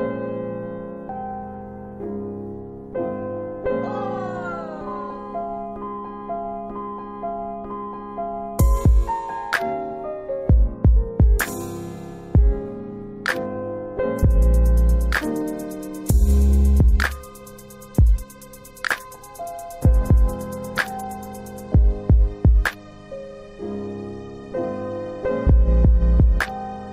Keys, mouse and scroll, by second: 2.2 right click, 2.8 middle click, 3.9 middle click, 4.3-5.4 scroll up 1, 5.5 click, 9.3 click, 9.6 scroll down 3, 11.1 click, 11.8-12.3 typing, 12.3 Return, 13.3 middle click, 14.2 F3, 15.7 alt+w, 16.2 alt+w, 17.3 alt+w, 19.2 alt+w, 20.3 F3, 21.1 middle click, 22.1-22.7 scroll up 1, 22.7 middle click, 22.7 scroll up 1, 23.0-24.1 scroll down 3, 23.4-24.1 scroll up 1, 24.9 scroll up 1, 25.1 click.